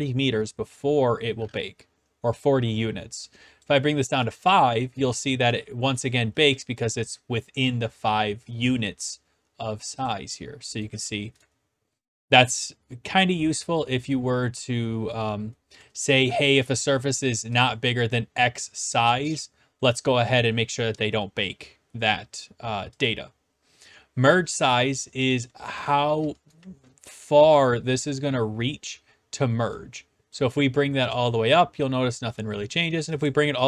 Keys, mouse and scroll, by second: 1.6 click, 3.6 click, 4.4 click, 5.1 w, 5.5 d, 5.9 right click, 9.1 click, 10.1 click, 11.1 d, 11.4 right click, 16.5 click, 17.7-18.7 drag, 23.0 click, 25.3 click, 25.9 click, 26.6-27.1 typing, 27.1 right click, 30.3 click, 31.1 click, 33.2 click.